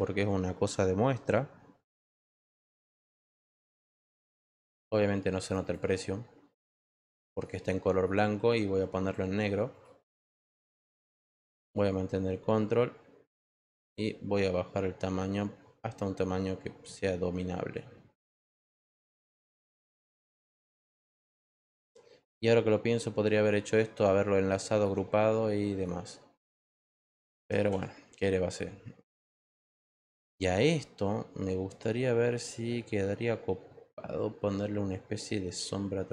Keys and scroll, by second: 2.1 shift+4, 2.8 1.